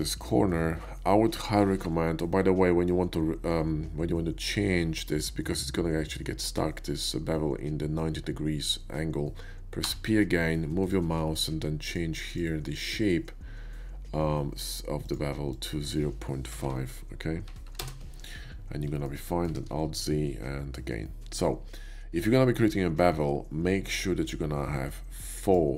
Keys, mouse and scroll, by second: 0.1 ctrl+b, 9.9 p, 10.9 click, 10.9 p, 11.7 click, 12.3 click, 15.0 click, 15.5 click, 16.6 Insert, 16.6 BackSpace, 17.7 5, 17.8 Return, 18.5 BackSpace, 19.0 middle click, 19.3 middle click, 19.6 ctrl+z, 19.9 ctrl+b, 20.2 ctrl+z, 25.5 click.